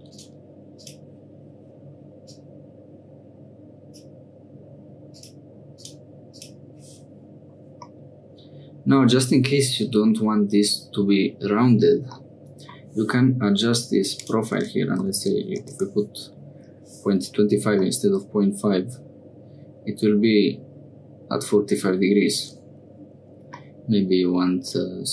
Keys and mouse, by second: 0.1 click, 0.7 click, 2.2-4.0 drag, 5.1 click, 5.7 click, 6.3 click, 7.9-10.0 middle drag, 12.2 middle click, 14.1-16.3 drag, 17.9-22.3 middle drag, 23.6-25.1 middle drag.